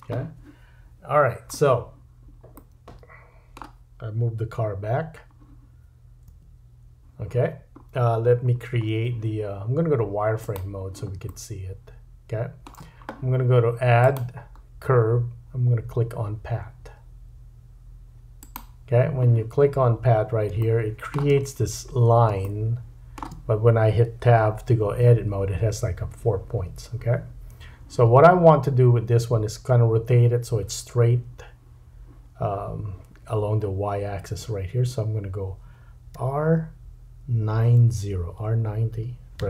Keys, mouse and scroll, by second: 2.5 middle click, 4.5 KP_7, 6.3 KP_Decimal, 7.3-9.3 scroll down 9, 8.1-10.4 middle drag, 9.3-10.4 scroll down 1, 10.4 click, 10.5-14.0 middle drag, 14.0-21.3 drag, 20.1-20.4 scroll up 2, 20.6 shift+middle click, 21.4-22.3 scroll up 7, 22.4 shift+middle click, 25.1 Tab, 28.0 Tab, 36.2 r.